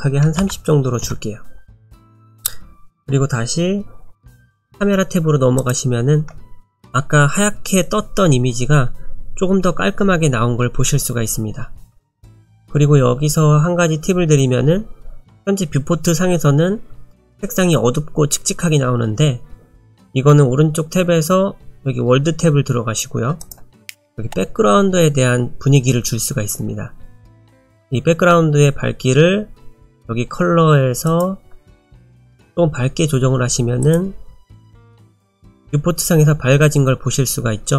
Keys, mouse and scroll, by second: 23.4 click, 31.1 click.